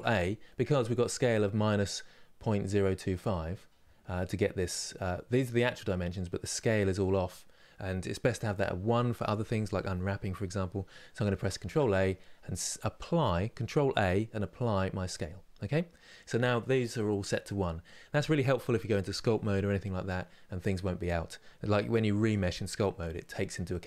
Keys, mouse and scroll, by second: 11.3 ctrl+a.